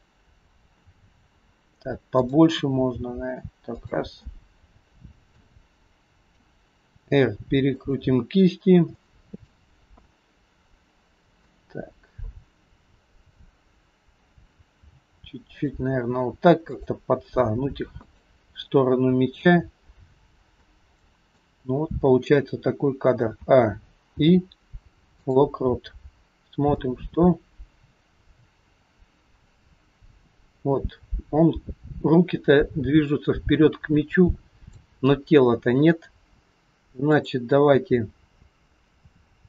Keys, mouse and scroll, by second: 2.2 click, 3.0 g, 4.3 middle click, 6.9 r, 9.0 middle click, 10.0 middle click, 10.0-11.0 scroll up 1, 14.8 r, 16.8 click, 17.4 r, 18.7 middle click, 19.9-20.5 scroll up 2, 20.7 middle click, 22.2-22.9 scroll down 5, 23.4 a, 24.1 i, 26.8 click, 37.2 click.